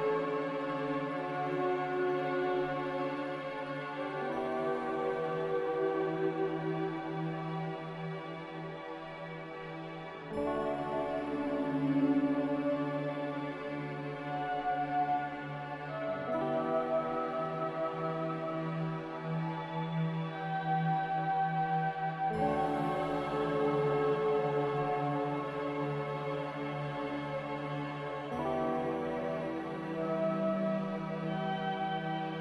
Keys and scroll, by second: 8.4 5, 8.8-16.0 Return, 21.3 z.